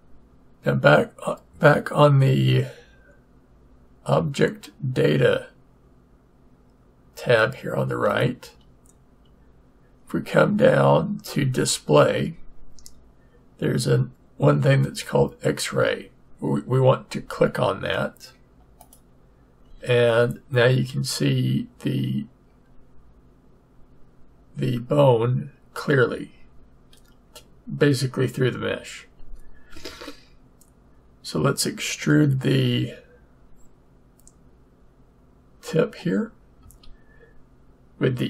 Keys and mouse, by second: 8.1-9.9 drag, 18.8-20.6 drag, 36.6 e.